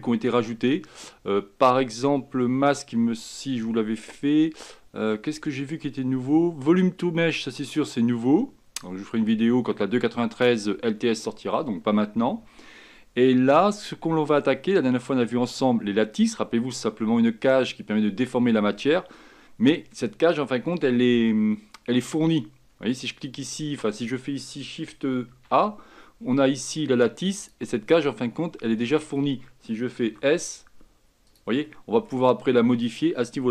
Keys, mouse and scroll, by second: 25.4 shift+a, 28.8-30.2 middle drag, 30.2 s, 31.8-33.0 middle drag, 33.0-33.5 drag.